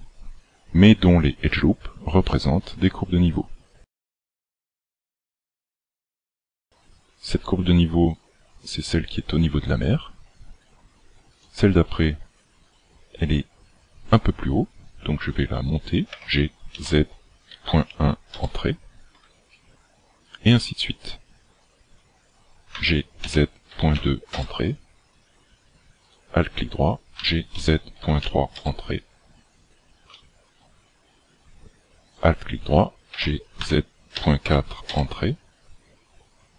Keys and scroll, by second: 16.1 g, 22.7 g, 27.2 g, 33.1 g.